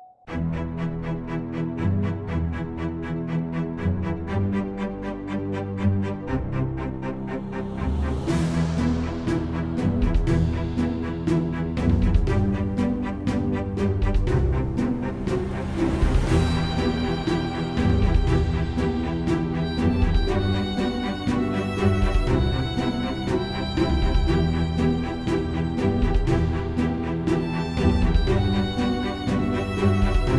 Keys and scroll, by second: 0.0-1.1 typing, 6.1 typing, 8.5-10.8 typing, 17.7-22.4 typing, 23.8-25.9 typing, 26.0 Return, 29.9-30.3 typing.